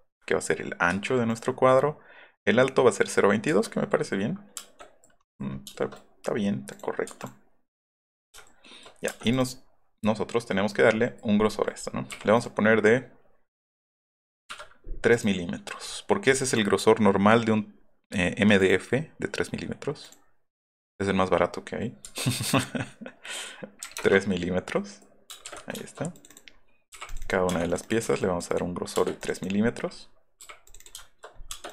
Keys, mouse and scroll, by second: 0.9 Escape, 1.3 click, 3.4 Escape, 3.6 middle click, 3.9 middle click, 4.8 middle click, 5.2-6.7 middle drag, 6.7 click, 7.2 click, 7.7 click, 9.0 space, 9.2 click, 9.4 click, 9.9 middle click, 10.5 middle click, 11.0 middle click, 11.5 middle click, 12.1 p, 12.3 click, 15.1 click, 16.4 click, 18.5 click, 21.1 click, 22.0 Escape, 22.5 click, 23.8 KP_3, 23.9 Return, 24.3 scroll up 2, 24.8 click, 25.3 space, 25.4 Escape, 26.1 click, 26.3 click, 27.0 click, 27.2 click, 27.5 space, 27.7 click, 27.8 click, 28.2 click, 28.5 click, 29.0 space, 29.2 click, 30.4 p, 31.0 shift+middle click, 31.5 space.